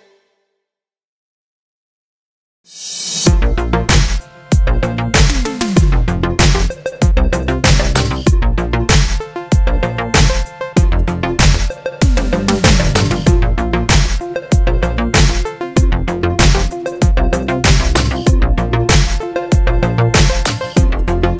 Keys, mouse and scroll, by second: 0.7 click, 1.7-3.9 drag, 4.6 2, 4.7 click, 5.9-8.7 drag, 6.2 KP_7, 6.6 s, 8.7 shift+right click, 9.6-11.6 drag, 9.8 s, 12.0 g, 12.8 click, 13.2 h, 13.8 ctrl+z, 14.3 g, 14.8 click, 15.1 g, 16.2 Tab, 16.3 click, 16.5 Tab, 17.1 shift+click, 17.5 ctrl+click, 17.9-19.6 middle drag, 18.8 shift+d, 19.0 Return, 19.3 Tab, 19.6 click.